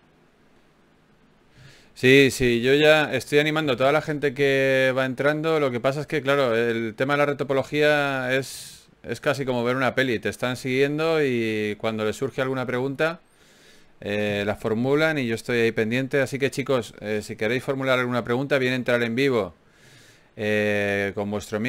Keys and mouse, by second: 0.3-1.3 drag, 1.3 right click, 2.5 middle click, 2.7 ctrl+Tab, 3.5-4.7 drag, 5.9 click, 6.1 right click, 6.7 alt+m, 8.9 right click, 9.5 g, 11.3-14.4 drag, 14.9 middle click, 15.5 middle click, 17.9 KP_Divide, 19.3 ctrl+Tab.